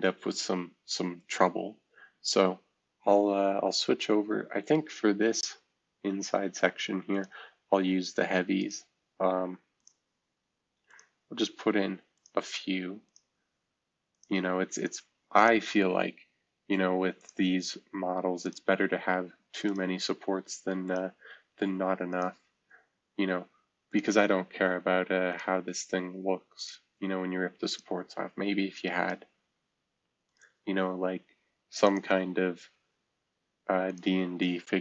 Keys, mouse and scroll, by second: 0.0-1.7 right drag, 1.7-3.2 middle drag, 1.7-3.2 scroll up 1, 4.8-5.5 scroll up 2, 5.5-6.3 scroll up 1, 7.1-17.0 drag, 17.2-18.5 drag, 19.6 click, 20.8 click, 22.1 click, 23.9-32.0 drag, 33.9 click.